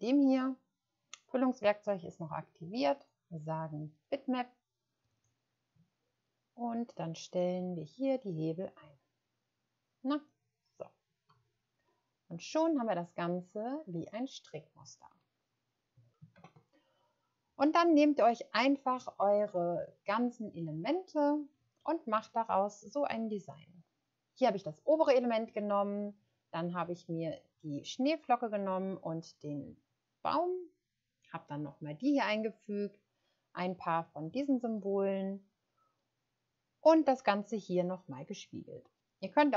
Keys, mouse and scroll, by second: 5.1 click, 11.3 space, 16.3 ctrl+0, 20.9-21.2 scroll down 1.